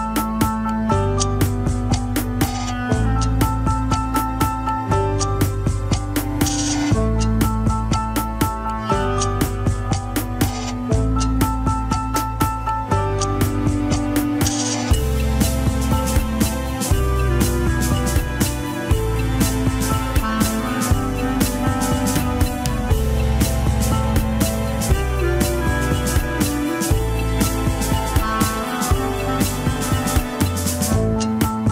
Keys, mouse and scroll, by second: 0.2 ctrl+Tab, 1.3-3.0 drag, 3.0 ctrl+Tab, 3.7 scroll down 2, 4.6 click, 5.6 ctrl+Tab, 5.7 click, 6.9 r, 9.4 ctrl+Tab, 9.6 shift+click, 10.1 ctrl+Tab, 11.0 ctrl+Tab, 11.1 shift+click, 11.4 ctrl+Tab, 12.1 alt+z, 12.8 alt+z, 13.2 ctrl+Tab, 13.8 click, 14.6 shift+click, 15.2 ctrl+Tab, 16.0 ctrl+Tab, 16.1 scroll down 3, 16.6 ctrl+Tab, 17.1 a, 17.4 alt+r, 17.7-18.3 scroll up 4, 18.1 shift+middle drag, 18.6 ctrl+Tab, 18.9-19.2 shift+drag, 19.8 click, 20.5-20.8 shift+drag, 21.2 ctrl+Tab, 22.0 Tab, 23.0 Tab, 27.0 ctrl+Tab, 27.3 shift+click, 28.0 ctrl+Tab, 29.1 ctrl+Tab, 31.0 scroll down 2.